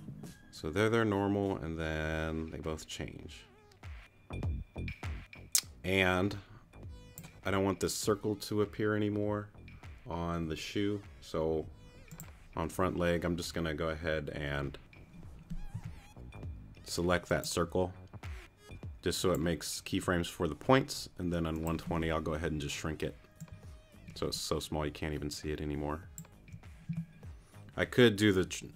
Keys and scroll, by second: 15.7 t.